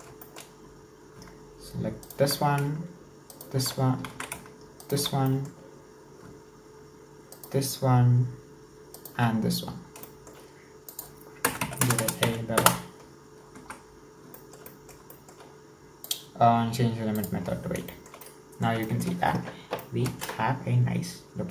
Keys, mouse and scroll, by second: 0.6-1.3 scroll up 4, 2.0 alt+shift+right click, 3.3 alt+shift+right click, 4.5 ctrl+z, 4.8 alt+shift+right click, 5.3 middle click, 5.6-6.6 scroll up 1, 7.3 alt+shift+right click, 8.9 alt+shift+right click, 9.7-10.1 scroll down 2, 10.1 shift+middle click, 10.9-12.0 drag, 12.0 KP_0, 13.9-14.3 scroll down 2, 14.3-16.1 shift+middle drag, 16.1-17.9 drag, 17.9-19.2 shift+middle drag, 19.2-19.8 scroll up 1, 19.8-21.5 shift+middle drag.